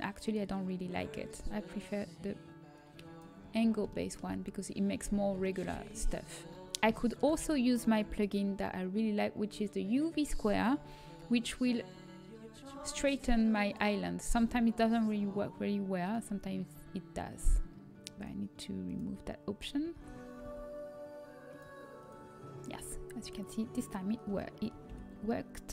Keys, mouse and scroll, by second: 1.6-4.3 drag, 4.3 middle click, 9.4 a, 9.4 n, 13.5-15.4 drag, 14.5 l, 15.9-24.0 drag, 21.4 a.